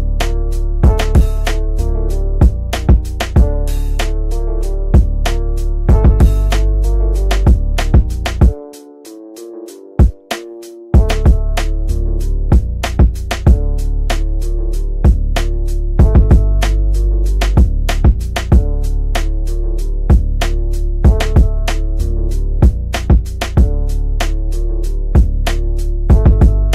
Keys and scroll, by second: 9.4 shift+Page_Down, 25.2 F3, 25.6 Escape.